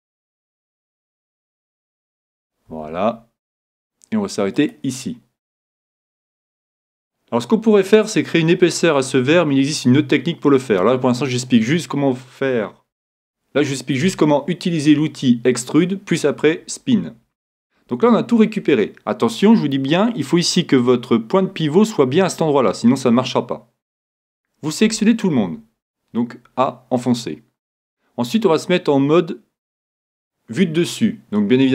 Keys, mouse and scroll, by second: 1.3 e, 2.8 e, 4.7-6.5 drag, 7.0-9.4 middle drag, 7.7-8.9 scroll up 1, 9.9-11.4 scroll down 1, 11.4-15.1 middle drag, 24.8 a, 25.4 a.